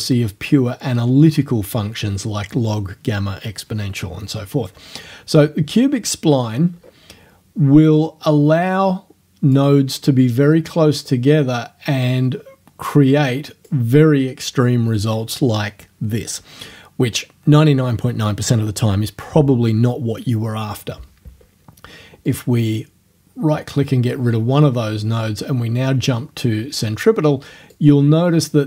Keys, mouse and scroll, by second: 6.7 scroll up 1, 8.0-9.8 drag, 11.1-13.9 drag, 22.3 right click, 25.9 scroll down 1, 27.8-28.6 drag.